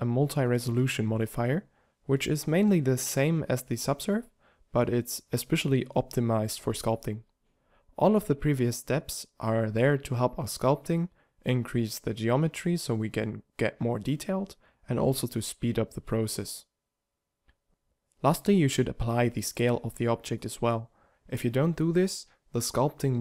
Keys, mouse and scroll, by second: 0.4 z, 18.9 ctrl+a.